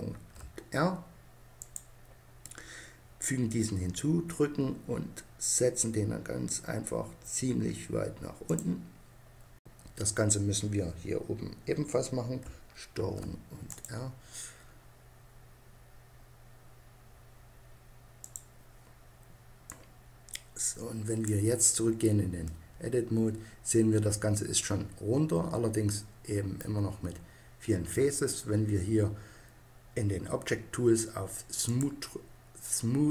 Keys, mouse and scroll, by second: 8.3-12.7 drag, 12.7 ctrl+r, 18.1-19.5 drag, 20.0-21.2 drag, 22.8-24.2 middle drag, 31.4-33.1 drag.